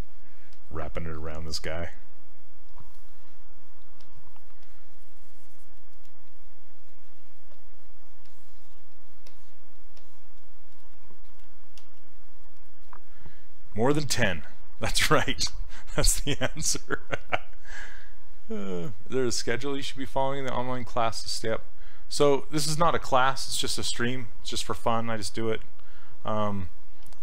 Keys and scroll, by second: 11.8 s.